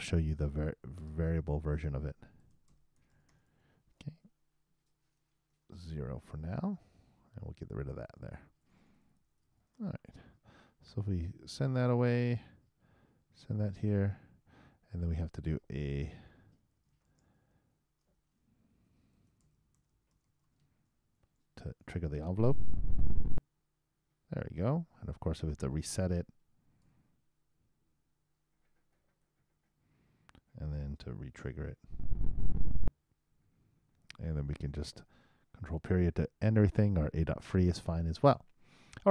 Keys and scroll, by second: 12.0 super+Return, 13.8 super+Return, 17.3-18.7 typing, 21.1-22.3 typing, 29.4 super+0, 29.5 super+Return, 31.7 super+i, 31.8 super+Return, 35.7 super+..